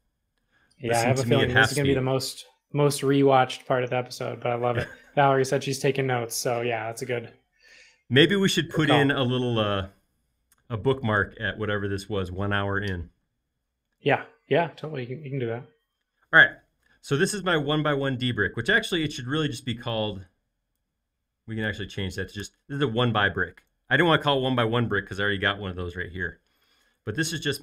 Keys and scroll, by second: 22.5 BackSpace.